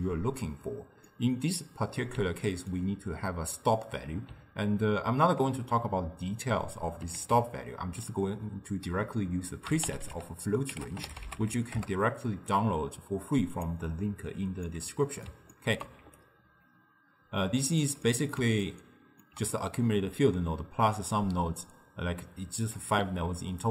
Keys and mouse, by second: 1.1-5.5 middle drag, 7.2 ctrl+a, 14.7-16.1 middle drag, 16.1 d, 16.2-17.9 right drag, 17.9 d, 18.1-21.7 middle drag.